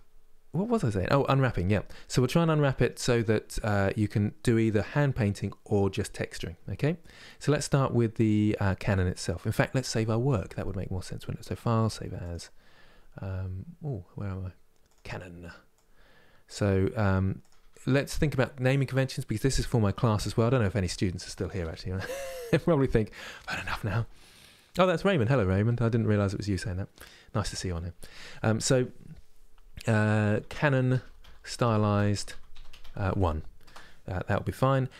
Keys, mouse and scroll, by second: 6.6 middle click, 7.3 scroll up 1, 8.7 middle click, 9.1-11.0 scroll down 1, 11.0-14.0 drag.